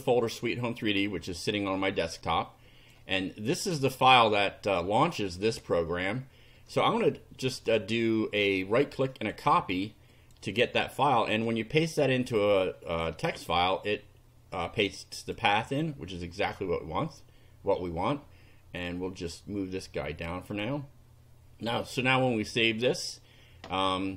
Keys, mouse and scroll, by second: 2.2 click, 3.6 click, 7.4 right click, 9.1 click, 10.1 click, 11.3 right click, 13.4 click, 14.9 click, 19.3-20.4 drag, 20.6 click, 22.5 click.